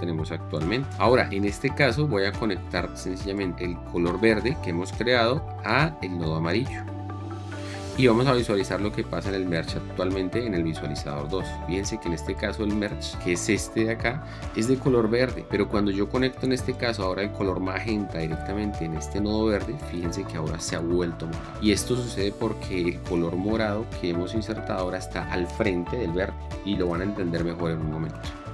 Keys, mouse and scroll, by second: 0.4 click, 10.7 2.